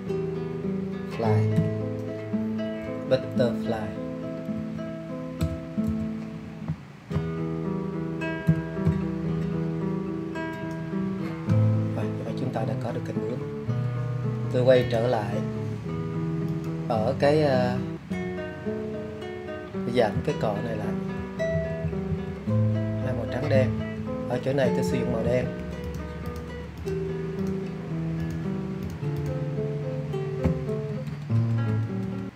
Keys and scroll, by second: 0.8 BackSpace, 2.0 f, 3.4 l, 3.8 y, 15.1 [, 16.4 [, 16.7 [, 17.0 [, 18.7 [, 19.8 [, 20.1 [, 25.6 super+z, 26.0 super+z.